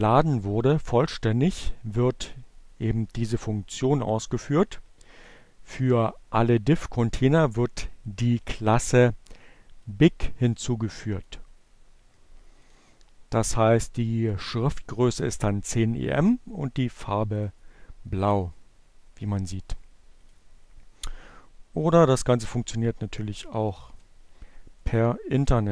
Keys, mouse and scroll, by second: 0.1-2.8 drag, 3.7 click, 4.4 click, 5.9-7.1 drag, 7.5-9.9 drag, 11.4 click, 16.6 click, 19.1 click, 21.3 click, 22.4 <, 23.0 shift+1, 23.6 shift+-, 25.0 click, 25.3 -.